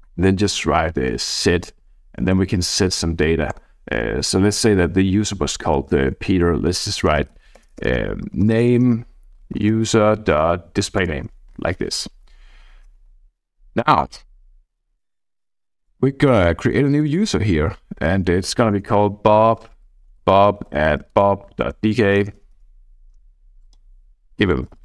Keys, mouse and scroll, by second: 0.0-1.3 typing, 2.4 shift+9, 2.8 {, 3.5 Return, 6.9-10.3 typing, 11.0 Return, 13.8 click, 14.9-16.2 drag, 16.9 click, 18.4 b, 18.7 Tab, 20.0-22.2 typing, 22.3 Tab, 22.5 Tab, 23.2-24.1 scroll down 1, 24.4-24.8 typing, 24.4 click.